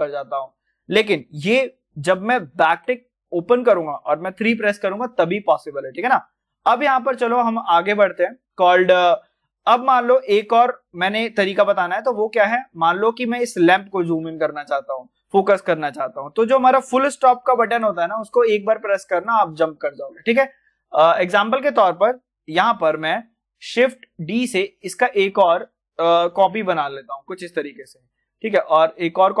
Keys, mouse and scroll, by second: 0.4 scroll up 1, 2.6 `, 5.9 click, 6.8 scroll down 1, 7.3 scroll up 1, 8.8-10.4 scroll down 1, 10.4 click, 12.3-12.8 scroll down 1, 12.8 click, 19.1 click, 19.4-19.8 scroll down 1, 20.8 middle click, 21.3 click, 23.8-26.2 shift+drag, 26.2 shift+d, 27.3 shift+click.